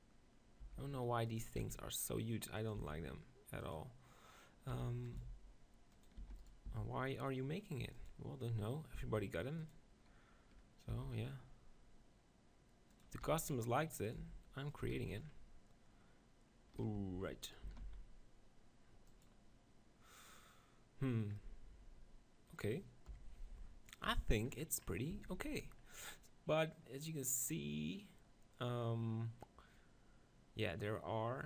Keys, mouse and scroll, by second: 0.6 e, 1.4-5.6 drag, 1.6 s, 2.8 e, 4.7 e, 5.2 s, 6.0 click, 6.2 e, 6.5 right click, 6.7 s, 7.9 click, 8.9 s, 9.5-11.5 drag, 10.9 e, 11.5 middle click, 13.0-16.7 drag, 13.2 e, 14.2 s, 14.8 Tab, 14.9 z, 16.7 middle click, 17.0 g, 19.2-21.0 drag, 21.2-23.6 middle drag, 23.1 KP_1, 24.1 Tab, 25.1 Tab, 25.3 z.